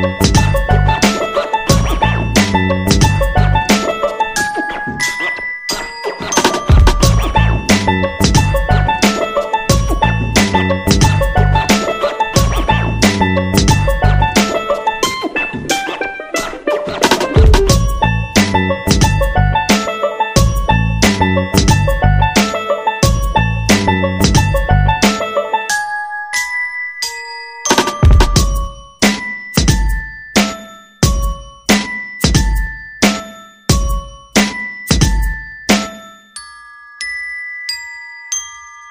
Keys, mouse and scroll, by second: 1.2 shift+click, 7.5 click, 18.4 Up, 18.5 Up, 19.5 typing, 21.0-22.3 drag, 22.3 Up, 22.3 Right, 24.0 click, 26.1 shift+click, 26.7 shift+click, 36.1 F9, 36.7 click.